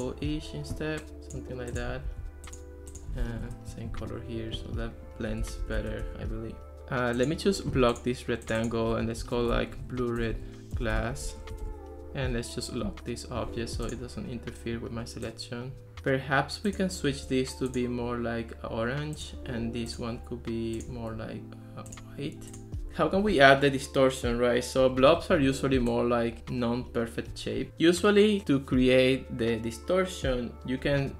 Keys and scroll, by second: 2.1 super+c, 3.3 super+v, 3.5 Return, 5.4 Escape, 9.1-11.8 typing, 12.0 Return, 25.2 ctrl+s.